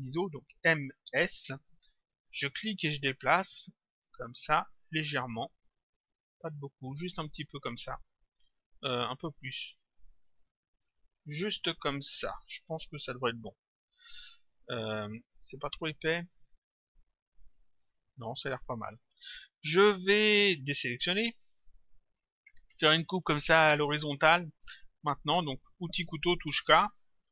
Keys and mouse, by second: 0.6 m, 1.1 s, 3.1 click, 15.0 click, 20.6 click, 26.5 k.